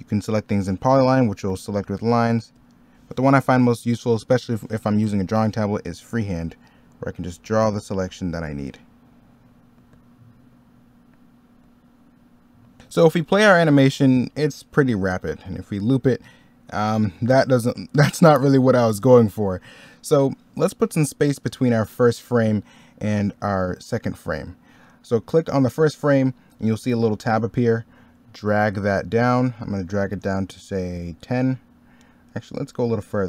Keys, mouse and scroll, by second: 4.8 middle click, 12.8 middle click, 19.9 middle click.